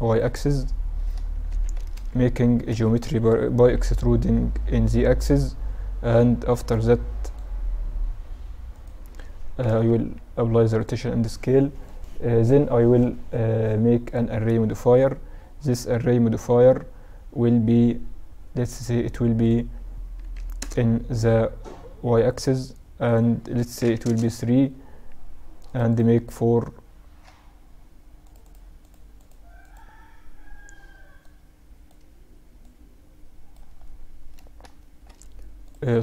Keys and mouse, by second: 0.5-1.6 middle drag, 1.6 Tab, 1.8 a, 2.0 a, 2.7 a, 3.8 e, 7.0-10.7 drag, 8.7 middle click, 9.3 Tab, 9.8 ctrl+a, 11.9-14.2 drag, 19.5-21.4 drag, 23.1-24.9 drag, 25.7 click, 26.7-28.3 middle drag, 28.3-34.5 drag, 34.5-36.0 middle drag.